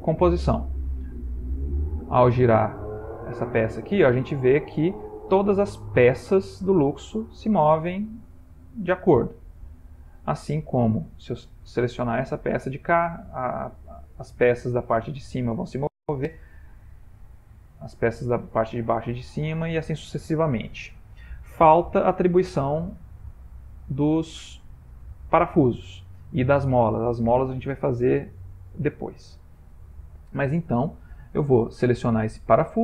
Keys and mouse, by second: 1.2 click, 2.9 r, 11.5 click, 13.6 r, 17.0 click, 18.5 r, 22.5 middle click, 23.9 ctrl+middle click, 24.5 middle click, 24.6 shift+middle click, 25.3 middle click, 25.9 ctrl+middle click, 26.8 ctrl+middle click, 27.1 shift+middle click, 27.9 shift+middle click, 28.2 shift+middle click, 28.7 ctrl+middle click, 31.3 click.